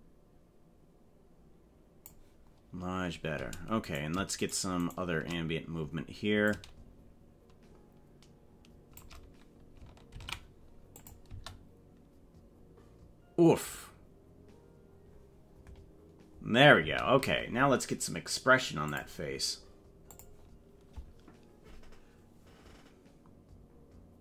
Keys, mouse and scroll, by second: 3.9 right click, 5.0 shift+right click, 6.4-9.0 shift+drag, 10.2 ctrl+s, 11.0 click, 11.3 space, 16.8 space, 18.8 click, 20.2 click.